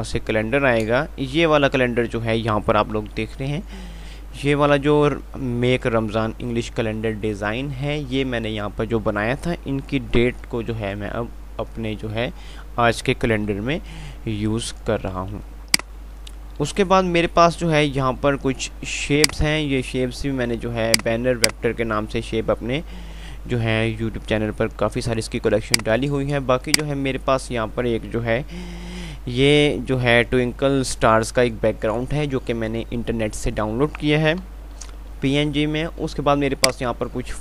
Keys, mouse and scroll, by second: 15.0 F5, 15.7 click, 16.4 F3, 21.1 click, 25.9 click, 26.5 F2, 34.7 F3.